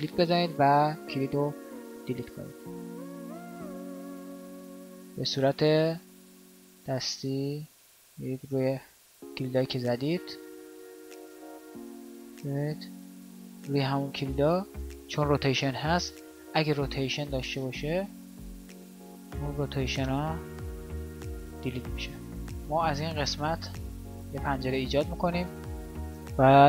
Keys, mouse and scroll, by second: 14.6-22.2 drag.